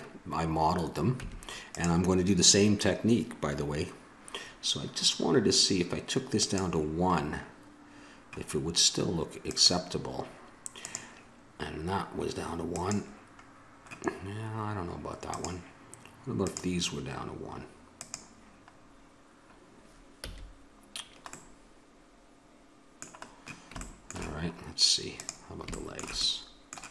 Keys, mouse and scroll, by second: 1.2 Tab, 6.4 click, 7.2-9.4 middle drag, 9.4-13.5 drag, 13.5 middle click, 14.3-19.8 drag, 20.1 a, 21.5-23.2 middle drag, 23.3 middle click, 25.1-26.9 right drag.